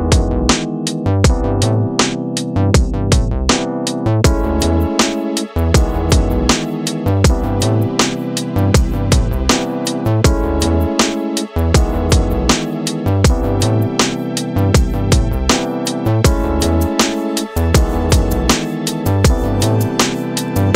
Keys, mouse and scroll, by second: 4.7-6.3 drag, 6.3-7.4 scroll up 2, 7.4 middle click, 7.8-9.4 scroll up 3, 10.0-11.3 drag, 11.3 KP_0, 15.3-16.1 scroll down 5, 16.1-17.3 shift+middle drag, 17.3 scroll down 2, 18.9 shift+a.